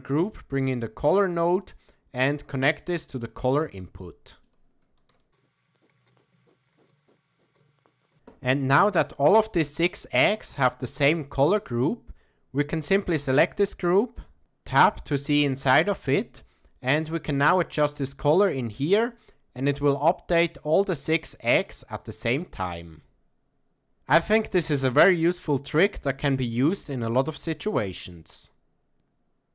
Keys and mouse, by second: 2.2-3.4 drag, 4.3 click, 6.3 shift+a, 7.0 shift+a, 7.8 shift+a, 10.7-12.3 drag, 15.3-15.7 middle drag, 16.9-28.3 drag.